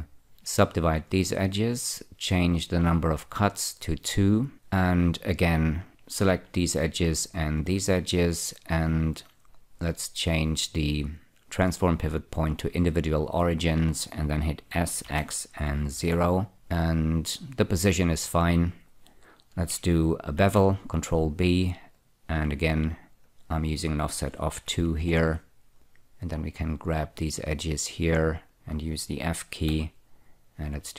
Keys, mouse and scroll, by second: 0.6 <, 3.8 click, 5.9 click, 7.1 shift+click, 13.2 click, 15.3 s, 15.4 x, 16.3 0, 16.5 click, 20.7 ctrl+b, 22.2 click, 23.6 click, 24.9 2, 25.3 Return, 27.7 click, 28.8 shift+click, 30.0 f.